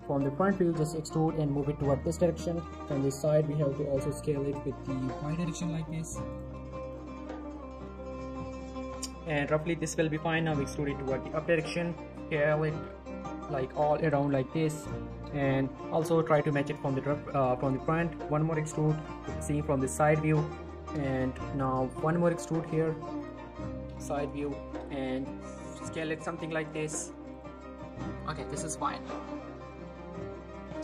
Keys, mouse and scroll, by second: 0.5 scroll down 1, 0.7 e, 2.1 click, 3.0 scroll up 1, 3.2 typing, 5.2 y, 6.3 click, 6.4 g, 6.9 click, 7.7 s, 8.1 y, 8.5 click, 8.8 scroll down 1, 8.9 shift+middle click, 9.9 shift+middle click, 10.4 e, 11.4 click, 11.7 s, 12.1 t, 13.7 click, 13.9 g, 14.3 click, 14.5 r, 14.8 click, 15.7 scroll up 1, 15.9 g, 16.4 click, 16.7 shift+middle click, 17.1 e, 18.2 click, 19.1 shift+middle click, 19.6 g, 20.0 click, 21.9 e, 23.2 click, 23.4-23.9 scroll down 1, 24.4 shift+middle click, 24.7 typing, 26.2 click, 26.3 g, 26.6 click, 26.8 r, 27.3 click, 27.5 g, 27.8 click, 28.0 z, 28.1 scroll down 1, 28.5 middle click, 28.9 click, 29.1-30.1 middle click, 30.0 scroll up 1, 30.2 middle click, 30.4 scroll down 1, 30.6 middle click.